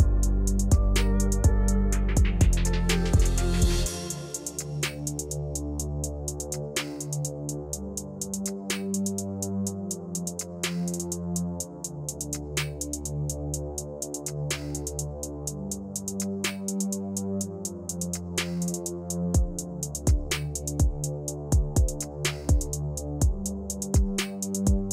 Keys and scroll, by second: 3.7 v.